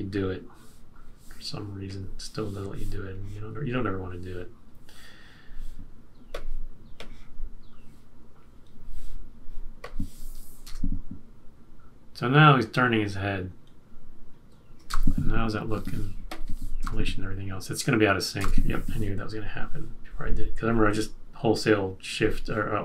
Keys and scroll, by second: 10.6 Return, 14.9 Return, 16.8 Return, 18.3 Return.